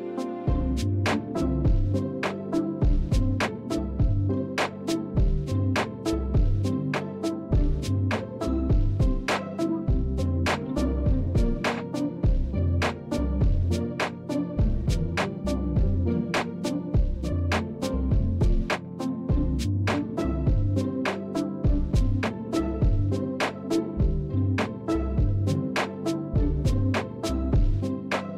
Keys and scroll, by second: 0.0 Tab, 3.8 Tab, 4.9 a, 5.6 KP_7, 7.5 1, 11.1 s, 16.7 s, 23.6 Tab, 24.9 KP_7, 26.6 Tab, 28.2 Tab.